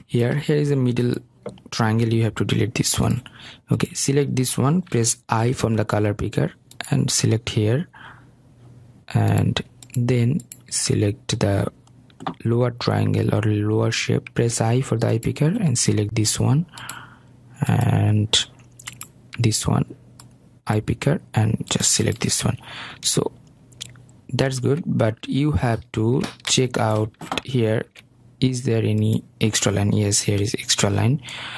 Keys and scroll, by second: 2.7 Delete, 4.0 i, 30.7 Delete.